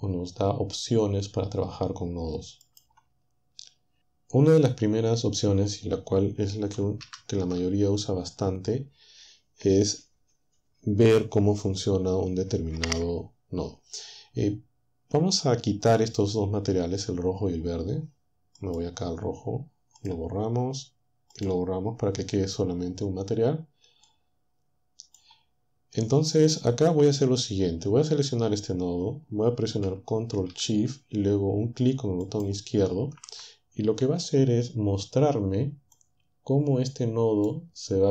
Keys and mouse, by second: 2.6 click, 7.2 ctrl+Up, 18.6 click, 20.0 click, 21.4 click, 24.1-25.3 drag, 32.3 ctrl+shift+click, 36.0-37.7 drag.